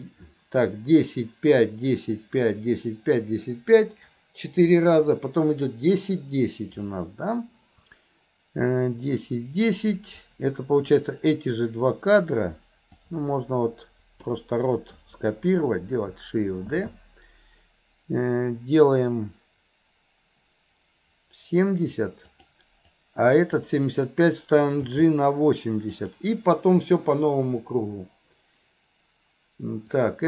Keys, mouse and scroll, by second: 10.2-10.9 drag, 13.1-14.4 drag, 23.0-23.6 drag, 24.9 g, 29.9-30.2 drag.